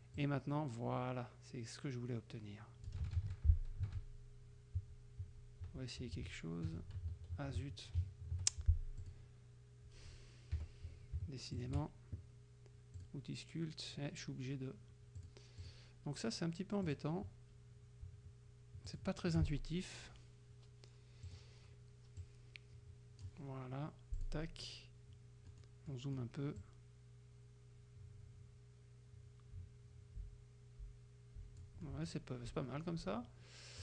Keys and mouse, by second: 0.2-3.2 drag, 3.2 ctrl+z, 4.0 ctrl+z, 4.8 ctrl+z, 9.0 click, 10.6 F7, 11.6 shift+click, 13.0 click, 15.2 click, 15.7 click, 16.9 click, 18.9 shift+click, 21.3 click, 22.2-23.4 drag, 24.2 click, 25.5 middle click, 26.0 middle click, 26.7-31.9 drag.